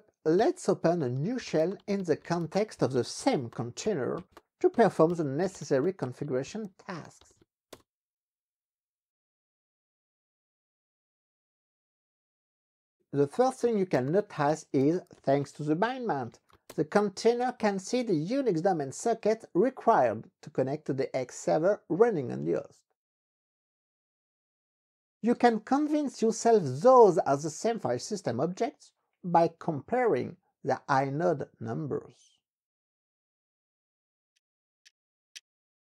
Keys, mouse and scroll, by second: 0.4-7.8 typing, 13.4-16.7 typing.